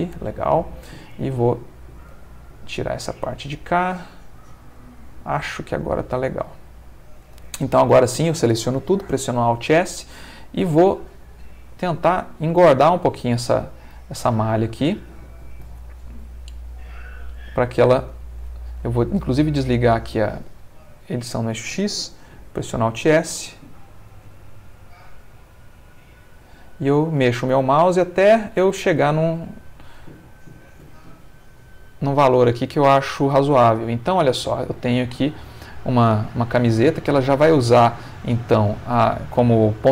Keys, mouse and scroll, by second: 1.5 alt+click, 2.1 alt+x, 2.4 alt+click, 2.8-4.1 alt+middle drag, 4.4-6.4 middle drag, 6.5 middle click, 7.5 a, 9.4 alt+s, 13.5 Escape, 13.9 click, 15.7 alt+s, 17.9 Escape, 19.5 click, 20.5-21.6 middle drag, 22.3 alt+s, 30.5 shift+click, 31.1-36.1 shift+middle drag, 36.1 Tab, 36.5-37.5 middle drag, 38.0 middle click, 39.1-39.9 middle drag.